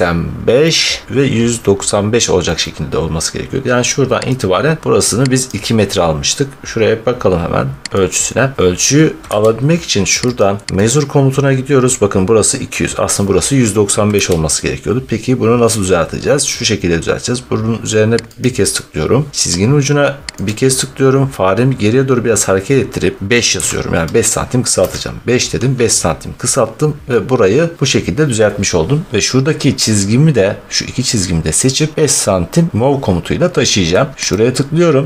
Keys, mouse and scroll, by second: 2.5 middle click, 4.2 click, 5.3 scroll, 5.4 click, 8.0 click, 9.1 Escape, 10.2 click, 10.8 click, 14.0 Escape, 14.9 middle click, 18.2 click, 20.4 click, 23.4 5, 24.7 Return, 27.0-27.5 scroll, 28.2 scroll, 29.3-30.3 scroll, 33.6-34.2 scroll, 34.2 click.